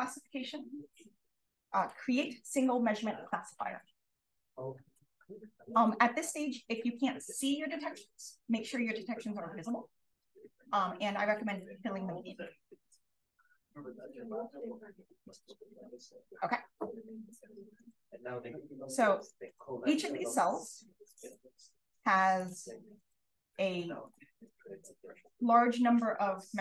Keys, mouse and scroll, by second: 5.1-5.9 scroll up 1, 5.9-7.8 scroll up 1, 7.8-9.9 scroll up 1, 9.9-11.0 scroll up 1, 11.0-11.6 scroll up 1, 11.6 click, 18.1-19.2 drag, 19.5-21.1 scroll up 2, 21.2-22.9 drag, 23.9 d, 24.3-26.6 scroll up 2.